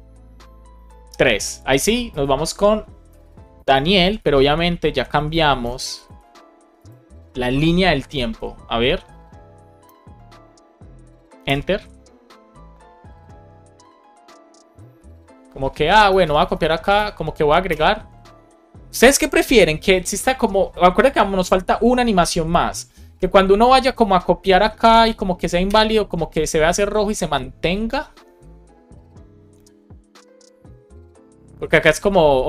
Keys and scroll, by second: 3.0 BackSpace, 3.4 Down, 4.2 Down, 4.8 Down, 5.0 Left, 5.5 BackSpace, 5.9 super+s, 9.7 Return, 11.3 Return, 15.9 BackSpace, 17.6 Return, 24.2 BackSpace, 25.5 Return.